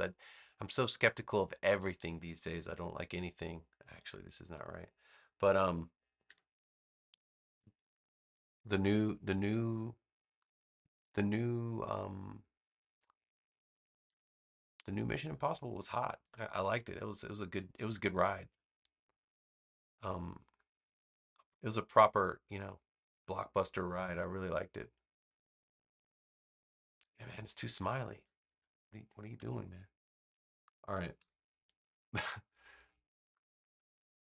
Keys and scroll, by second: 6.1 v, 7.0 BackSpace, 16.1 a, 24.0 v, 28.0 super+z, 31.1 a.